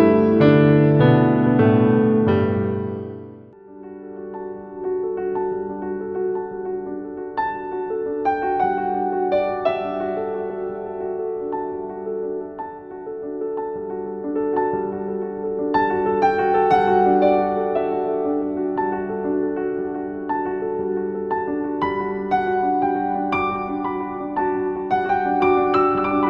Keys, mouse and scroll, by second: 0.0-0.2 typing, 0.6 click, 2.2-4.2 shift+drag, 4.2-25.5 alt+drag, 25.5 alt+z, 26.1 click.